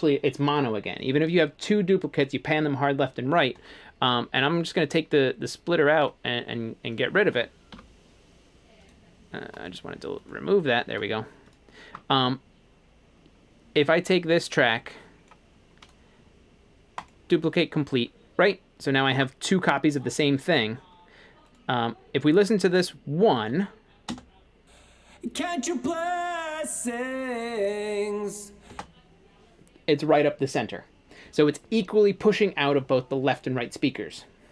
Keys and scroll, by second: 7.8 BackSpace, 24.1 space, 28.8 space.